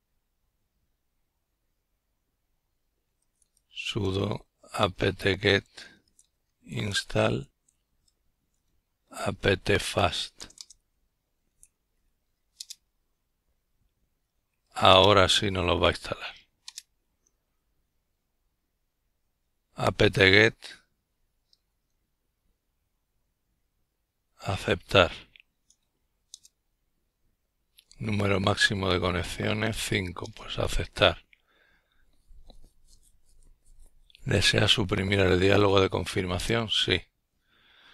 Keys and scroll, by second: 0.2 Return, 2.6 typing, 9.2 Tab, 9.8 Return, 13.0 Tab, 13.6 Return, 18.0 Left, 19.7 Return.